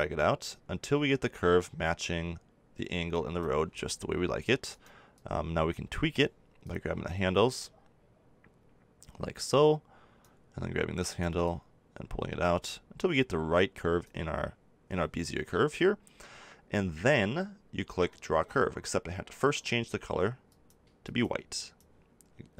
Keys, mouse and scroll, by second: 5.1-8.5 drag, 11.4-12.7 drag, 12.8 click, 19.5-21.3 drag.